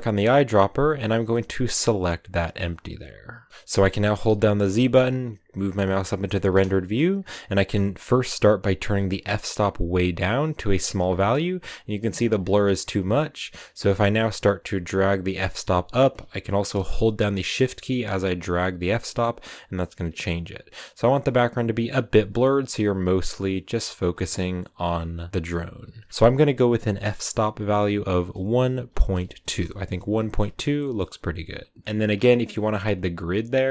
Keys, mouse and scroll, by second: 3.5-4.0 scroll down 1, 4.3-5.9 scroll down 1, 5.9 z, 9.7-11.1 drag, 11.1 shift+middle click, 11.3 scroll up 1, 14.2-17.2 drag, 26.1-29.5 drag, 30.7-31.8 shift+middle drag, 31.8-33.7 drag.